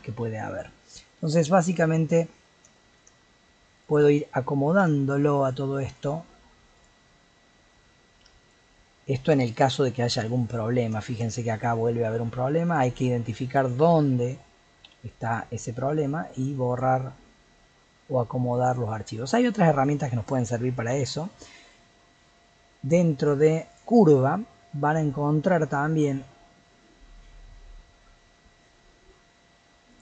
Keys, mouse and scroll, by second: 0.5 g, 2.4-2.7 scroll up 3, 2.7-3.7 shift+middle drag, 3.7 click, 4.8 g, 5.9 click, 6.7 click, 7.6 g, 8.7-9.4 scroll down 7, 9.4 shift+middle click, 9.7-10.0 scroll down 2, 10.0 middle click, 10.6-11.0 scroll up 2, 11.0 shift+middle click, 11.3-12.7 scroll up 4, 12.7 click, 14.8 x, 15.9-16.7 scroll down 3, 16.7 click, 17.7 g, 19.1 scroll down 2, 19.3 middle click, 19.8 click, 20.9 l, 23.7 click, 29.9 click.